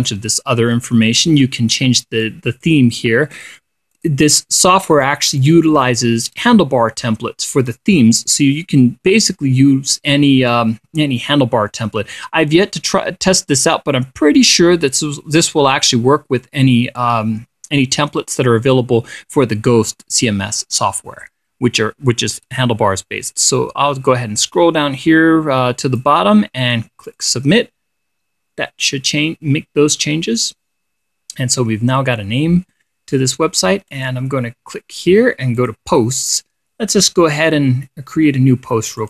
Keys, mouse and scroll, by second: 2.7 click, 3.8 click, 4.4 click, 5.4 click, 5.9 click, 8.2-26.7 drag, 27.5 click, 34.4 click, 36.1 click, 37.8 click.